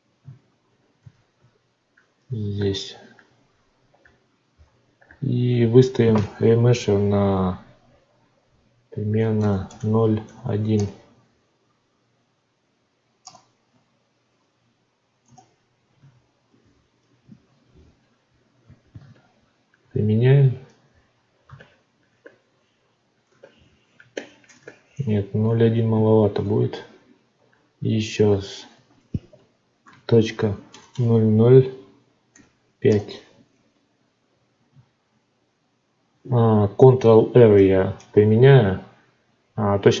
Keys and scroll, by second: 0.9 alt+v, 10.7 Return, 13.2 Return, 15.2 Return, 16.4 ctrl+r, 20.2 ctrl+r, 25.9 ctrl+z, 32.8 Return, 37.5 ctrl+r.